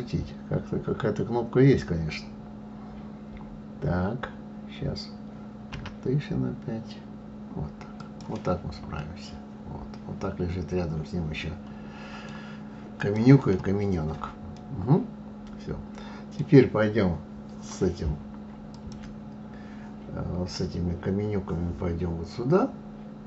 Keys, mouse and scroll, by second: 5.7 r, 9.0-12.0 middle drag, 13.0 click, 14.6-17.5 middle drag, 18.7 click.